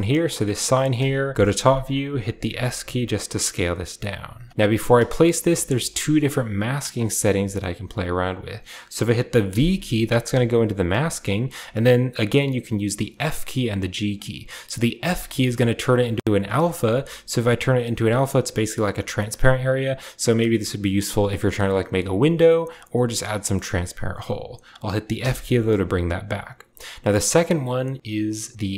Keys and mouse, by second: 0.0-6.0 middle drag, 1.3 KP_7.